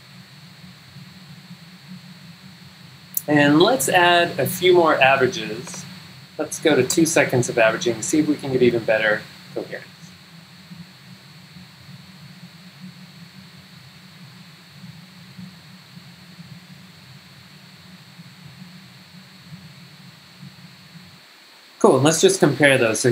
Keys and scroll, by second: 21.1 g, 22.7 z.